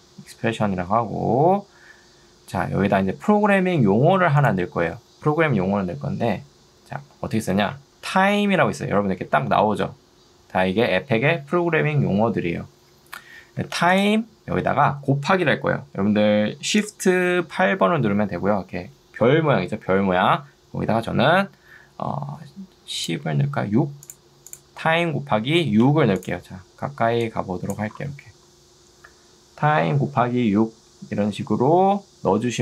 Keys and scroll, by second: 7.2-9.3 typing, 13.6 Escape, 17.8 shift+8, 25.4 6, 27.2 ctrl+2.